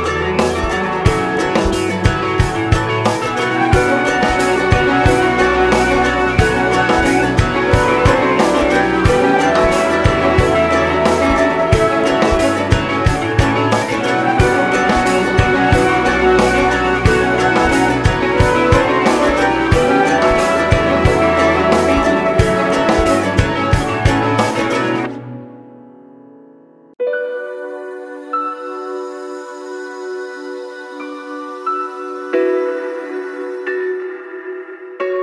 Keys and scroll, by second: 2.6 ctrl+Return, 2.6 ctrl+\, 11.2 shift+F8, 17.9 shift+F7, 25.7 ctrl+j.